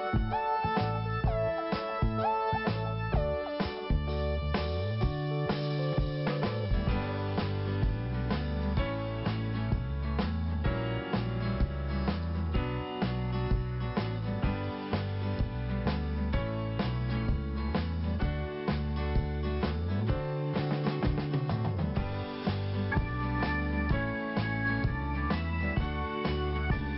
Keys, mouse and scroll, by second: 1.0 click, 3.7-4.1 scroll down 1, 4.5 click, 5.6 click, 7.9 click, 9.4-9.8 scroll down 1, 11.3 p, 12.1 click, 13.7 scroll down 1, 15.0 scroll down 1, 15.8 click, 15.9 click, 16.4-17.2 scroll down 1, 17.2 click, 18.8 scroll up 1, 21.3-21.6 scroll up 2, 24.8 click, 26.8 click.